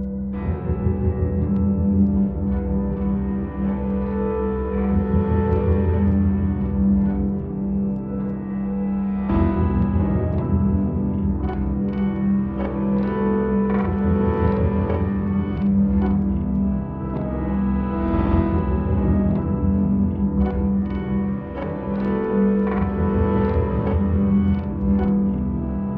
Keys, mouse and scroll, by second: 0.8-2.0 drag, 2.1 click, 3.4 click, 4.8 click, 6.0 click, 7.3 click, 8.8 click, 10.4 click, 12.7-14.8 drag.